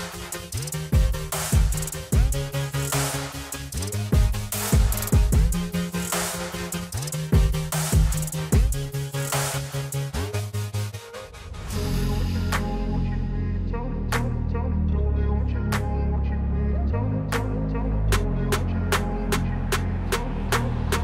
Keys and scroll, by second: 15.0 F4.